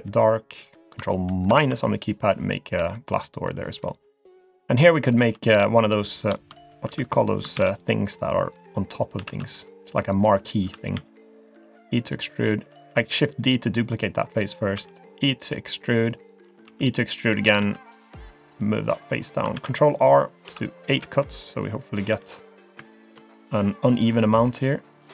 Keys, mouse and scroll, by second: 1.5 ctrl+KP_Subtract, 2.8 g, 5.0 click, 6.1 click, 6.9 3, 7.0 click, 7.6 shift+d, 8.3 click, 9.2 s, 10.7 s, 13.0 click, 13.9 middle click, 14.7 e, 16.7 e, 17.6 2, 18.0 click, 18.6 click, 19.5 ctrl+r, 21.7 middle click, 22.0-22.5 scroll up 3, 22.2 3, 22.9 alt+click, 23.5 alt+shift+click, 24.3 alt+shift+click.